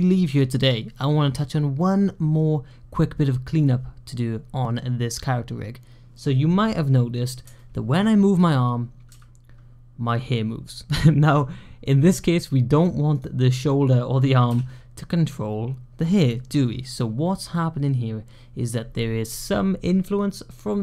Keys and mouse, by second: 7.4-7.8 shift+drag, 8.9 g, 14.3 g.